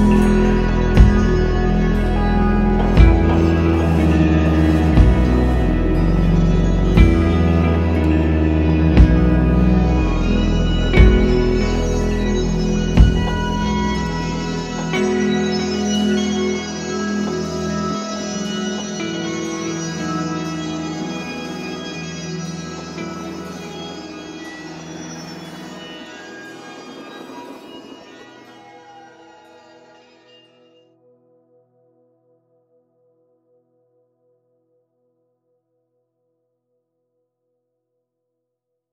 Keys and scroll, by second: 14.8 space, 35.7 space.